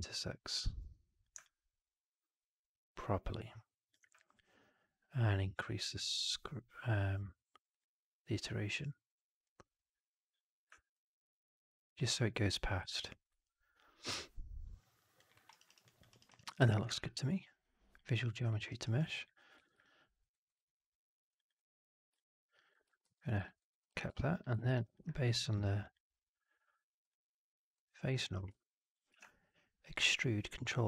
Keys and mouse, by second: 0.4 click, 1.4-3.8 drag, 10.9-12.0 alt+drag, 12.8-15.1 alt+drag, 15.3 alt+middle drag, 15.4 alt+right drag, 15.6 alt+right click, 15.8 alt+drag, 16.0 alt+right drag, 16.2 alt+right drag, 16.4 alt+drag, 16.8 shift+Tab, 18.4 middle drag, 18.6 right drag, 18.9 drag, 19.8 click, 20.3 right click, 21.3 click, 22.1 alt+click, 23.0 ctrl+f, 23.5 alt+right click, 23.7 alt+click, 24.0 3, 24.6 alt+right click, 24.8 alt+click, 26.1-28.0 drag, 29.0 ctrl+e.